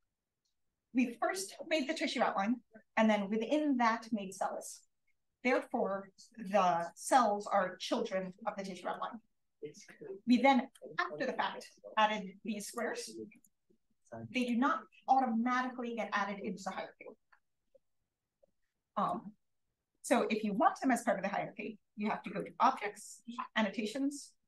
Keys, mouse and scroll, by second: 9.8 click, 13.8-15.1 drag, 19.6 click.